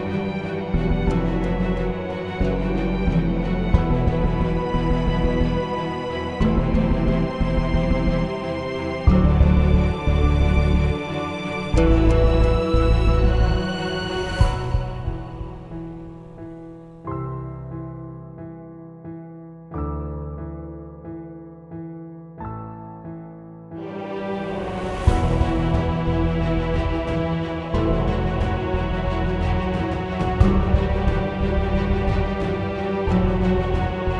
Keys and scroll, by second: 0.0-3.5 typing, 10.9-12.6 typing, 13.1 Return, 14.0-21.1 typing, 26.3-31.8 typing, 33.2 Up, 33.2 Return.